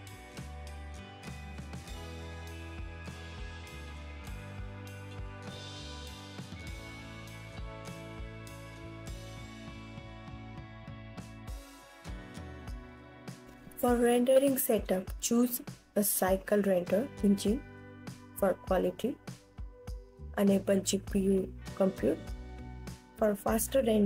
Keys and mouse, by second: 0.2 ctrl+s, 1.0-5.1 alt+drag, 5.4-8.7 drag, 11.9 ctrl+s, 13.5 click, 16.9-17.7 drag, 23.2-24.0 drag.